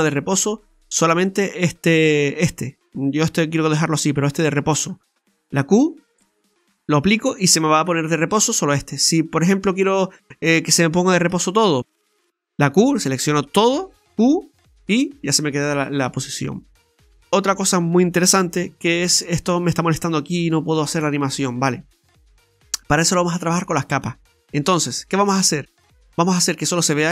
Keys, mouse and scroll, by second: 0.9 right click, 9.2 right click, 11.3 a, 12.6 q, 13.8 q, 16.2-16.5 scroll down 1, 16.8-17.2 scroll up 1, 17.2 middle click, 18.8 middle click, 20.8 middle click, 23.0 middle click, 23.9 middle click, 23.9-24.3 scroll up 3, 24.4 shift+middle click, 24.9 scroll down 1, 25.1 middle click.